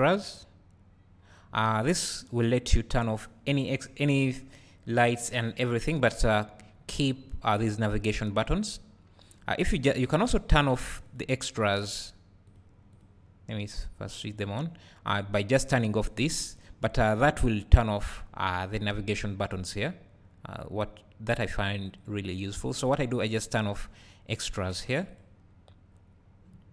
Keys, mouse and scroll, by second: 12.5 click, 14.1-16.6 drag, 21.5 click, 25.1-26.7 drag.